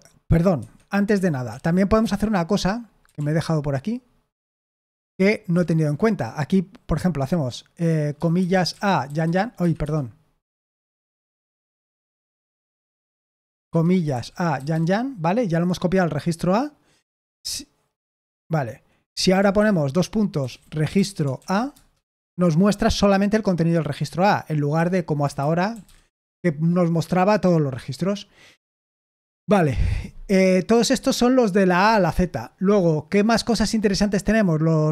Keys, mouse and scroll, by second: 0.5 Escape, 1.4 shift+;, 1.9 Escape, 3.1 super+l, 4.4 typing, 8.7-9.7 typing, 9.7 Escape, 12.1 typing, 13.8-15.1 typing, 20.1-21.8 typing, 24.7 Escape, 25.1-26.5 typing.